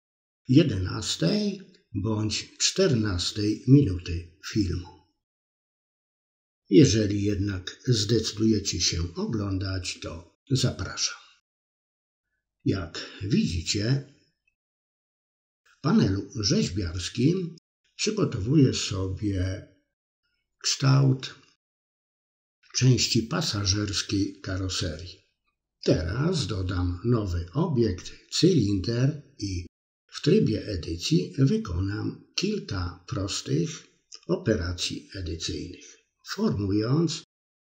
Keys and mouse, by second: 0.0 click, 0.5 ctrl+z, 1.1 click, 1.4 click, 1.9 click, 2.3 click, 2.6 middle click, 3.3 KP_3, 4.4-5.5 drag, 6.0 KP_1, 7.1-9.1 drag, 9.3 middle click, 9.8 KP_3, 10.5-12.2 drag, 12.3 middle click, 12.7 KP_3, 13.5-14.5 drag, 14.6 middle click, 15.2 KP_3, 15.8 space, 15.8 click, 17.4 ctrl+z, 18.0 drag, 19.4-21.2 drag, 21.4 middle click, 22.0 KP_1, 22.5 Tab, 23.4-24.0 drag, 24.8 click, 25.1 Tab, 26.0 r, 27.6 click, 28.0 s, 29.7 ctrl+r, 31.6 ctrl+b, 32.8 s, 33.3 s, 34.4 ctrl+z, 34.7 s, 35.6 middle click, 36.0 KP_3.